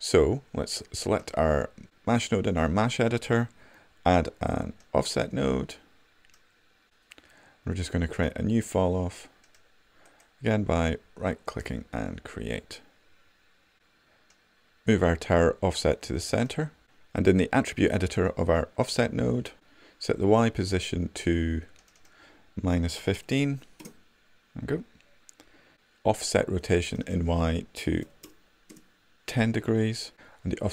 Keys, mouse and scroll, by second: 9.7-12.7 right drag.